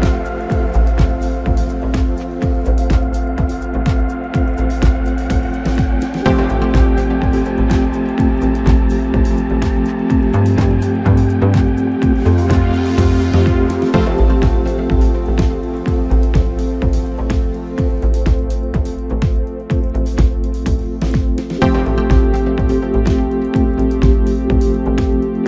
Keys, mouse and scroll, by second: 0.0 click, 0.1 click, 0.4 scroll down 3, 0.9 KP_1, 1.3 KP_Decimal, 2.0-2.3 scroll down 3, 2.3-3.4 middle drag, 3.4 ctrl+b, 12.9 scroll down 2, 13.5 KP_1, 14.6 Tab, 15.1-15.5 scroll down 4, 15.5-16.3 right drag, 16.3 scroll down 2, 16.8-17.5 middle drag, 17.5 scroll up 1, 17.8 Tab, 18.7 3, 19.2 click, 20.1 x, 21.1 Tab, 21.8 KP_1, 22.7-23.6 scroll down 1, 23.7-25.4 shift+middle drag.